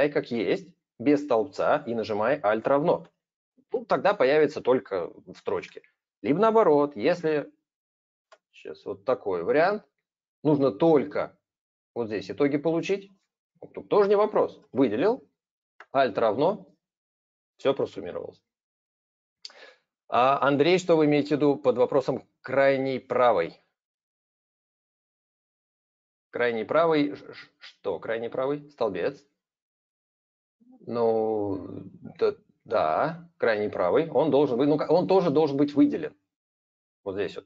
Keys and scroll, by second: 2.4 ctrl+a, 2.9 alt+=, 6.8 ctrl+z, 10.0 ctrl+-, 14.4 ctrl+a, 15.6 alt+=.